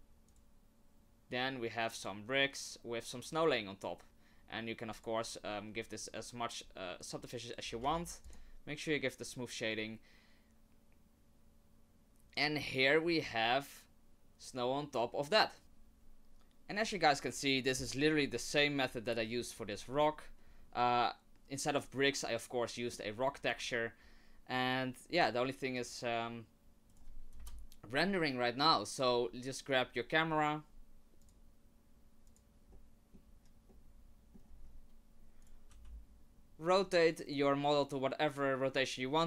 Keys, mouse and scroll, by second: 0.3 right click, 5.2 click, 7.1 right click, 7.8 w, 13.1-13.9 scroll down 2, 13.9-15.6 scroll down 1.